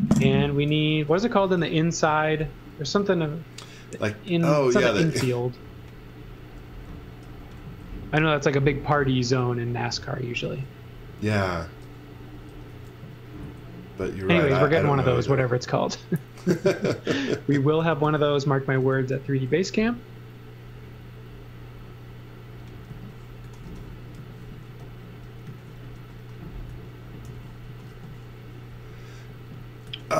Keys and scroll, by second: 0.9 z, 1.4 x, 1.7 v, 2.8 space, 7.3 b, 9.2 space, 11.2 shift+w, 12.5 b, 14.5 space, 14.9 s, 17.8 b, 18.8 space, 19.1 s, 22.9-28.4 typing, 29.9 x.